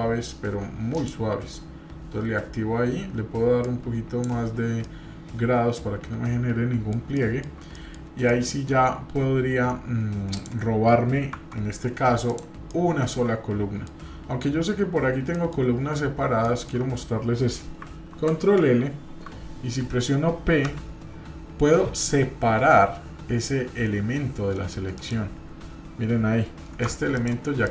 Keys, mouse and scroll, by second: 0.9 click, 3.6 click, 4.8-7.4 middle drag, 7.7 middle drag, 8.0-8.7 scroll down 2, 8.3-8.7 middle drag, 10.3 click, 11.3 Tab, 12.3 click, 12.7-14.0 middle drag, 15.3 middle click, 15.7-16.3 scroll up 1, 16.4 shift+middle click, 18.1 ctrl+l, 27.1 click, 27.6 click.